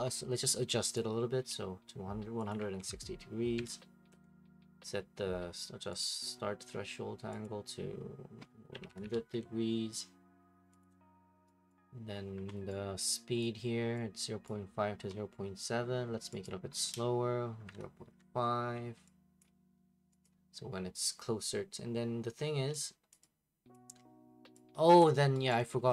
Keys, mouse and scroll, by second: 0.9 click, 2.3-3.5 typing, 2.5 click, 4.1 Return, 6.0 click, 7.4 click, 8.5-9.4 typing, 10.8 click, 11.7 right click, 12.7 right click, 13.4 click, 14.4 click, 16.4 click, 17.3-18.7 typing, 19.4 click, 20.2 click, 23.1 click, 23.7 click, 25.0 click, 25.5 right click.